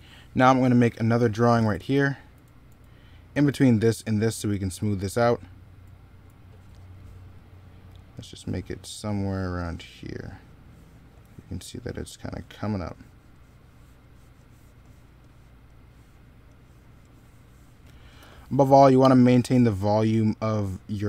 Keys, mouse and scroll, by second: 1.4-6.0 typing, 17.6 middle click, 18.0 s.